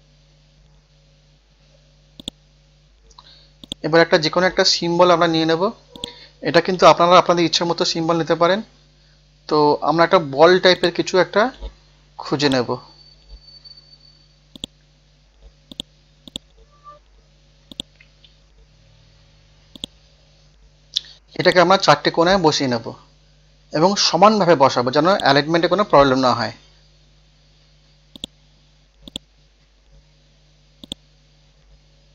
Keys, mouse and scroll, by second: 0.0 click, 7.1-8.0 typing, 12.3 click, 16.6 scroll down 1, 17.0 scroll up 1, 17.7 click, 18.5 scroll up 1, 19.8 click, 21.4 shift+click, 22.5 scroll up 1, 22.9 scroll down 1, 23.5 scroll up 1, 25.1 shift+click, 26.4 scroll down 1, 27.3 scroll up 1, 28.2 click, 29.6 scroll up 1, 30.8-32.1 drag.